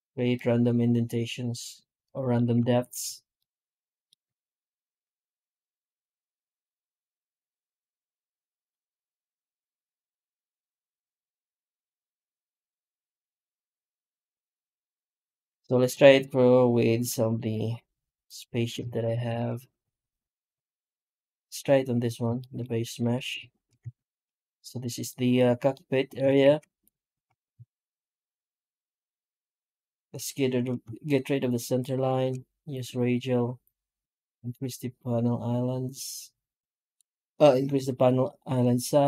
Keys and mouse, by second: 0.2-1.4 middle drag, 1.4-2.2 middle drag, 2.5 shift+middle click, 3.2-3.9 middle drag, 3.9 middle drag, 4.1 F9, 15.3 ctrl+shift+o, 19.1 ctrl+shift+o, 22.2 shift+middle drag, 22.8 middle drag, 23.3 shift+middle drag, 23.7 Tab, 23.8-24.2 middle drag, 24.3 middle click, 24.9 middle drag, 25.6-25.9 middle drag, 26.3 shift+q.